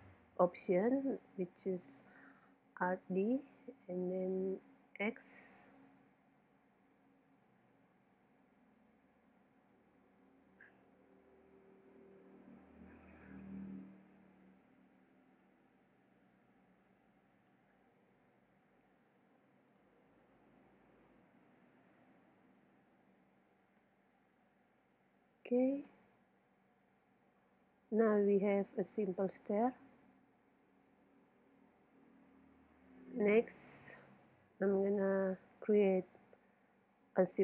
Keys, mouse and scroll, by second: 3.0 alt+d, 7.6 middle click, 8.4-10.1 drag, 11.4-14.4 middle drag, 14.4 z, 15.4 click, 15.7-17.0 middle drag, 18.1 g, 22.6-24.3 drag, 23.2 g, 25.0-26.8 drag, 25.9 z, 26.8-28.9 middle drag, 28.9-30.7 drag, 32.2-35.7 middle drag, 34.1 KP_7.